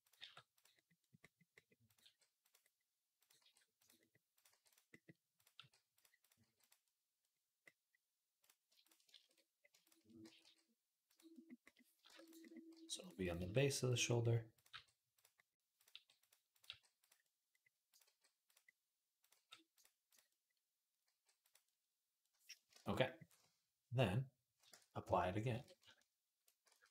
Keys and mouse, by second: 0.0 g, 1.7 click, 1.8 g, 3.0 click, 3.2 g, 4.1 click, 4.3 g, 5.1 click, 5.2 middle click, 5.4 g, 6.0 click, 6.1-8.2 middle drag, 6.2 g, 8.2 click, 8.4 shift+middle click, 8.6 shift+click, 8.7 shift+middle click, 9.0 shift+Tab, 9.6 shift+click, 10.0 g, 11.3-13.9 drag, 11.9 shift+Tab, 12.5 g, 13.2 g, 13.9 middle click, 14.3 click, 14.4-15.6 middle drag, 14.5 g, 15.6 click, 15.7-17.7 middle drag, 15.7 g, 16.5 g, 17.7 click, 17.9-19.0 middle drag, 17.9 g, 19.0 click, 19.1 middle click, 19.1 g, 19.9 click, 20.0 middle click, 20.1-26.1 drag, 20.9 g, 22.5 shift+Tab, 24.5 Tab, 25.3 shift+d, 26.1-26.9 ctrl+middle drag, 26.5 ctrl+a.